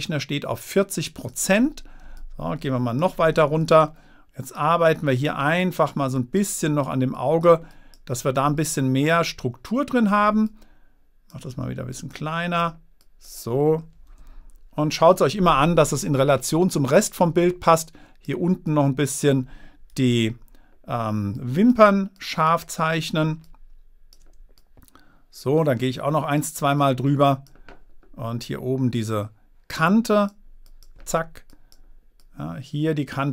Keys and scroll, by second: 14.5 super+-.